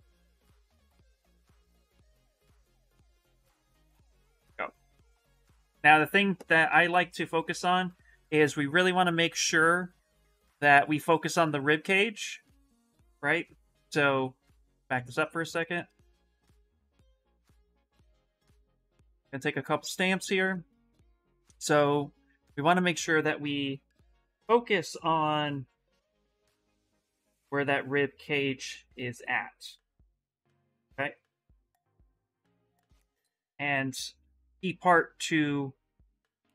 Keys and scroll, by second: 1.6 ctrl+z, 2.4 d, 5.6 s, 18.4 shift+s.